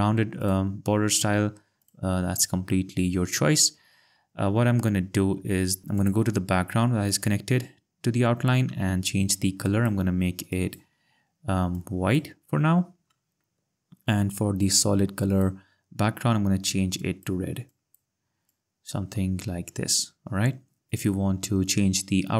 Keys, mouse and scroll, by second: 0.4 click, 6.0 click, 9.6 click, 10.5 click, 11.7 click, 15.3 click, 17.0 click, 18.5 click, 19.4 ctrl+scroll.